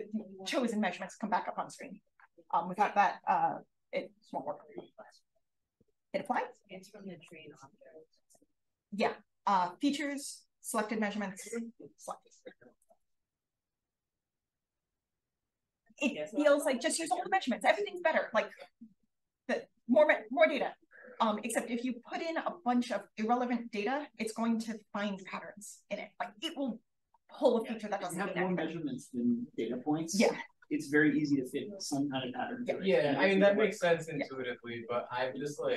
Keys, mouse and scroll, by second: 6.2 click.